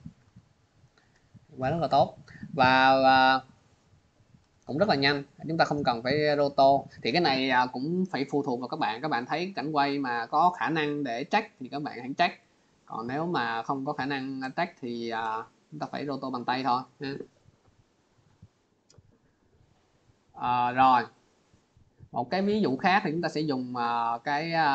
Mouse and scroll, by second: 0.0 click, 15.2 click, 17.5 click, 18.8 click, 21.6 click, 22.5 click, 22.7 click.